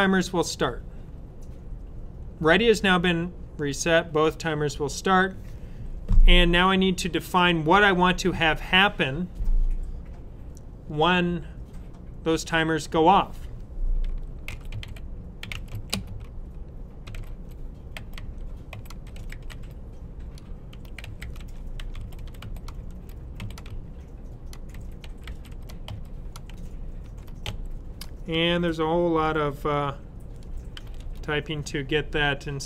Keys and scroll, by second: 14.2-27.4 typing, 30.7 typing.